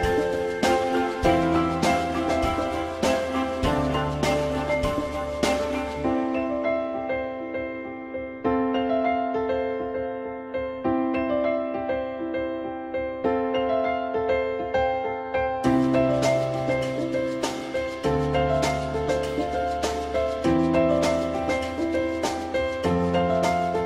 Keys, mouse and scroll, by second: 13.8 ctrl+z, 22.7-23.8 drag.